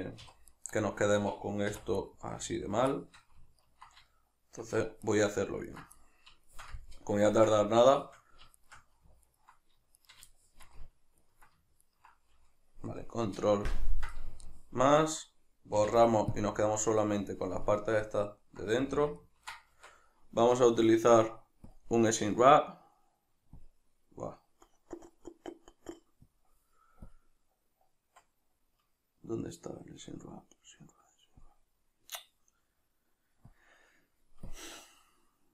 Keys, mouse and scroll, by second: 0.3 2, 0.5 right click, 1.7 3, 2.0 right click, 2.9-3.7 shift+middle drag, 3.7 ctrl+right click, 4.1 shift+middle click, 5.1 shift+right drag, 5.7 ctrl+right click, 6.0-8.6 middle drag, 8.6 shift+right drag, 9.3 ctrl+right drag, 10.0 shift+right drag, 10.4-11.2 shift+middle drag, 11.2 ctrl+right click, 11.9-13.7 ctrl+right drag, 13.7 ctrl+KP_Add, 14.5-21.7 shift+middle drag, 15.8 x, 18.9 a, 19.7 Tab, 21.7-25.4 drag, 25.4 middle click, 26.3-32.8 drag, 32.8 middle click, 33.5-35.5 drag.